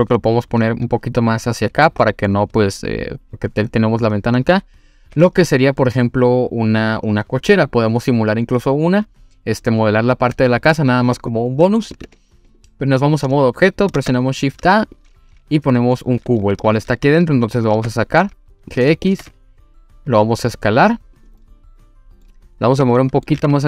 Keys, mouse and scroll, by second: 1.8 scroll down 1, 2.0 middle click, 11.5 middle click, 11.9 click, 12.1 Tab, 12.5 click, 13.3 click, 14.0 shift+a, 15.8-16.3 scroll down 1, 16.6 scroll up 1, 17.7 g, 18.7 click, 19.2 s, 21.2 click, 21.4-22.3 middle drag, 22.5-23.1 scroll down 2, 23.0 middle drag, 23.4 g, 23.4 y.